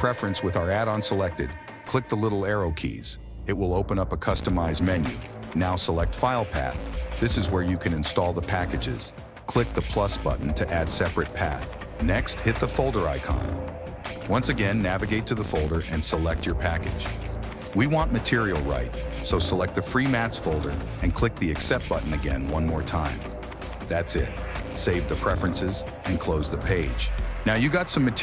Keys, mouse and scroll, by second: 26.9-28.2 drag.